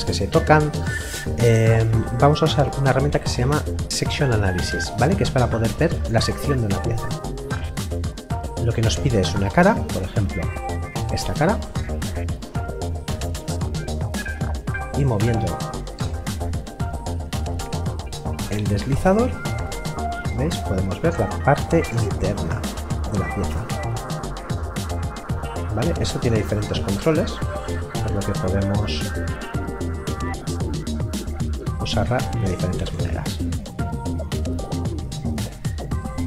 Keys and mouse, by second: 7.1 click, 11.0 click, 16.0 middle click, 18.4 click, 21.9 middle click, 26.7 click, 31.1 click, 32.9 middle click.